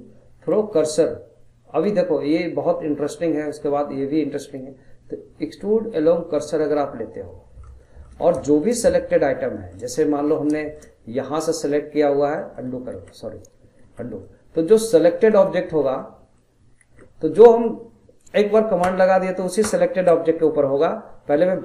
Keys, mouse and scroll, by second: 7.1-8.1 middle drag, 8.1 scroll down 2, 8.4 shift+middle click, 9.3 scroll down 1, 9.6 shift+middle click, 9.9 scroll up 1, 10.1-11.4 middle drag, 11.4 click, 12.3 middle click, 12.9 ctrl+z, 13.8 ctrl+z, 14.2-15.3 middle drag, 15.3 click, 16.0 middle click, 16.8 ctrl+z, 17.4-18.8 middle drag, 18.8 ctrl+z, 19.6 ctrl+z, 21.3 click.